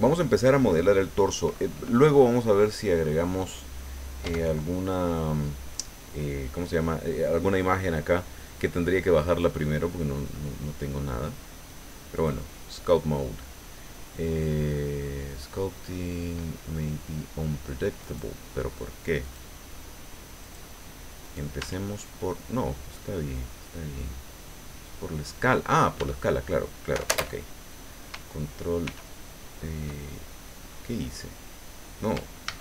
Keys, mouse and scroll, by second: 4.3 Tab, 9.4 click, 12.1 click, 18.0 right click, 19.2 click, 20.4 click, 21.2 right click, 21.6 Tab, 22.9-25.9 drag, 26.0 Tab, 28.8 ctrl+r, 32.5 ctrl+a.